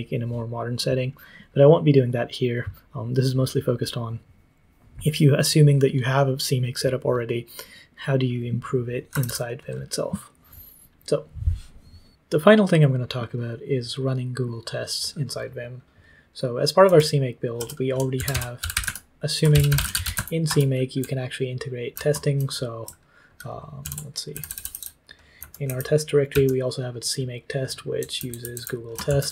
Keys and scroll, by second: 8.8-9.7 typing, 16.8 shift+i, 17.9-22.2 typing, 23.8 ctrl+t, 24.3-26.3 typing, 27.9-29.3 typing.